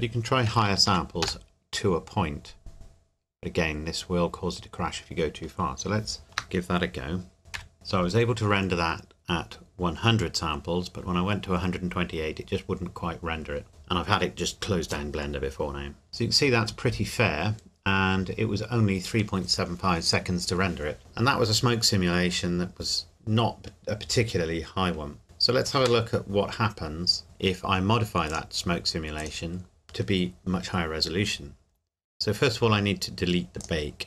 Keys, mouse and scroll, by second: 0.5 KP_1, 0.7 KP_2, 0.9 KP_8, 1.2 KP_Enter, 6.2 ctrl+s, 7.5 F12, 26.0 Escape, 27.2 click, 31.7-32.3 scroll down 1, 33.6 click.